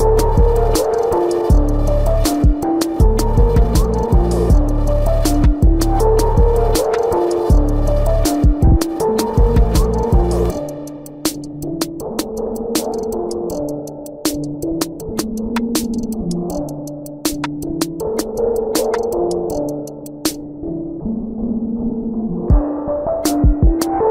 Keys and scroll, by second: 5.8 space, 11.3 ctrl+alt+z, 17.2 ctrl+alt+z, 18.3 ctrl+alt+z.